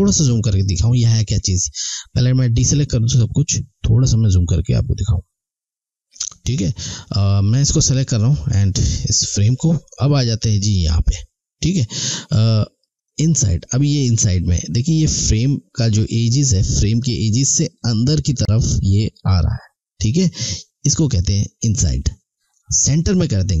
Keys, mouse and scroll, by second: 0.1 alt+Num_Lock, 0.4 alt+scroll up 1, 1.0 alt+scroll up 1, 1.9 click, 3.5-4.1 alt+scroll up 2, 5.6 alt+scroll up 1, 7.2 click, 13.0 click.